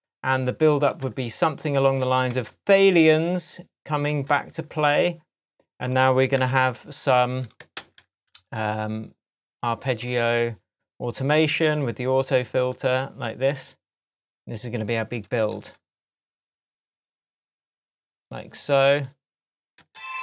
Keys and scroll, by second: 6.4 super+c, 7.8 super+v, 19.8 space.